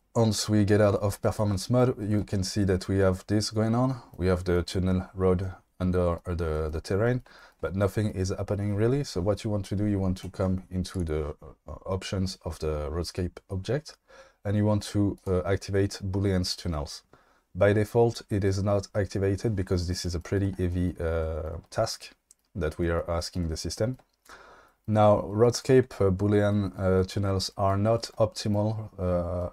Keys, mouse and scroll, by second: 17.5 click.